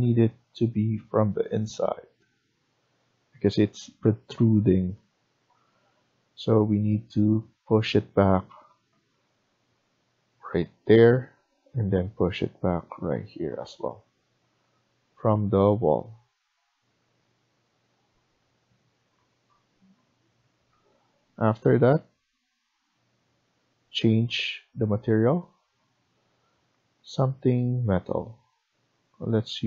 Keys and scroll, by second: 0.1 Left, 0.7 Left, 1.2 Left, 5.0 Escape, 9.0 Up, 11.0 Escape, 14.4 Right, 14.7 Right, 14.9 Right, 15.1 Right, 15.7 Right, 16.7 Escape.